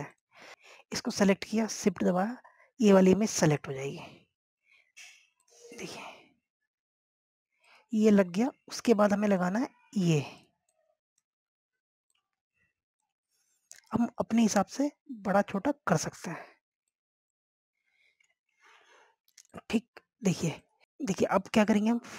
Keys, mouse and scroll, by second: 1.3 click, 4.6 shift+click, 6.1 click, 7.5 scroll up 1, 8.7 click, 10.4 click, 14.5 scroll up 1, 14.9 click, 19.6 shift+Page_Up, 20.3 scroll down 1, 20.6 click.